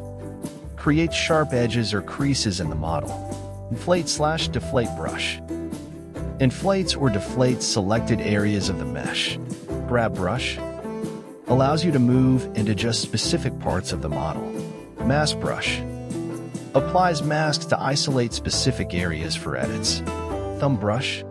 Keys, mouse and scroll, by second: 0.1 middle click, 0.3-1.6 drag, 1.6 middle click, 2.1 ctrl+z, 2.2 middle click, 2.4 ctrl+z, 2.5 ctrl+z, 2.7 ctrl+z, 3.1 click, 3.3 middle click, 3.5 click, 3.9 scroll down 3, 4.1 click, 4.6 scroll down 2, 4.7 ctrl+z, 4.9 ctrl+z, 5.0 ctrl+z, 5.2 scroll up 3, 5.4 click, 5.8 ctrl+z, 6.1 click, 6.2 middle click, 6.5 KP_1, 6.6 shift+middle click, 6.8 scroll up 3, 7.0 click, 7.7 ctrl+z, 8.0 click, 8.9 ctrl+z, 9.2 click, 10.0 ctrl+z, 10.4 click, 10.9 ctrl+z, 11.2-12.4 drag, 12.8 ctrl+z, 13.2-14.4 drag, 14.5 ctrl+z, 14.7 scroll down 3, 15.0-16.2 drag, 16.8 ctrl+z, 17.1 click, 18.1 middle click, 18.5 click, 18.7 ctrl+z, 19.1 click, 19.3 KP_1, 19.7-21.2 drag, 21.2 middle click.